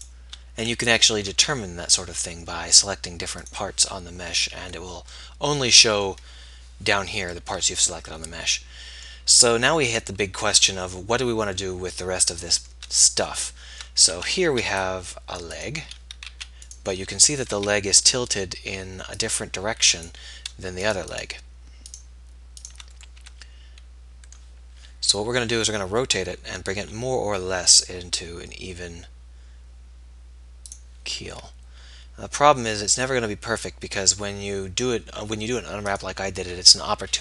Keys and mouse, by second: 0.3 b, 1.9 click, 1.9 g, 14.5 a, 16.9 a, 16.9 b, 21.1 b, 27.0 r, 31.6 g.